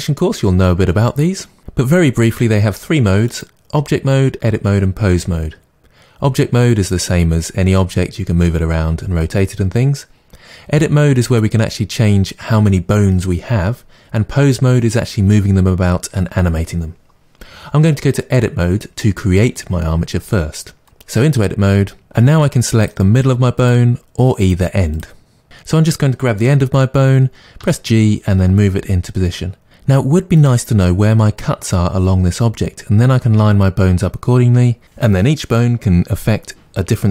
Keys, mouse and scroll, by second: 3.2-23.6 drag, 24.4 click, 24.9 click, 27.6 g, 30.4 click.